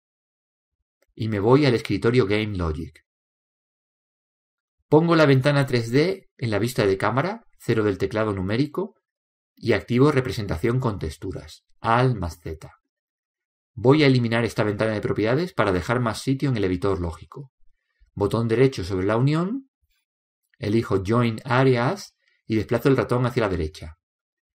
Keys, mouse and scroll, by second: 1.2-3.0 drag, 3.9-5.6 drag, 7.4 KP_0, 12.0 alt+z.